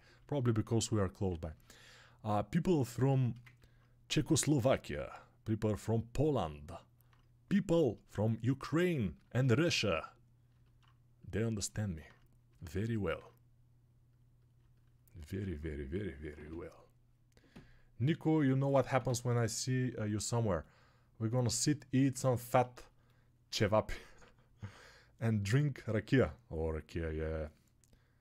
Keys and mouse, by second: 0.9-2.8 shift+right drag, 2.8-9.6 alt+shift+drag, 9.6 right click, 10.7 right click, 11.5 right click, 11.7 right click, 11.9 right click, 13.0-14.5 right drag, 14.5-28.2 alt+drag.